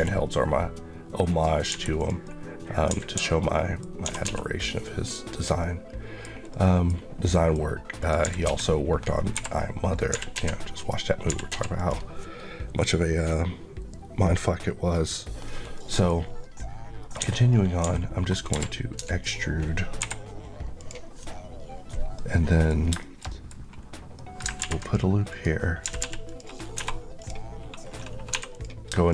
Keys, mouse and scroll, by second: 1.1 click, 1.6 g, 1.8 click, 2.1 middle click, 2.7-3.9 typing, 3.4 middle click, 3.7-4.1 scroll up 2, 5.2 click, 5.4 middle click, 7.8 click, 8.0-10.2 typing, 9.8 click, 10.6 click, 11.3 typing, 11.6 click, 15.6 middle click, 17.0-19.8 typing, 17.3 middle click, 20.6 click, 22.0 middle click, 22.7 scroll up 2, 22.8 shift+middle click, 23.4 scroll up 1, 24.0 middle click, 24.4 r, 24.6 click, 25.6 click, 25.7-26.6 typing, 26.1 click, 27.0 click, 28.2 3, 28.3 click.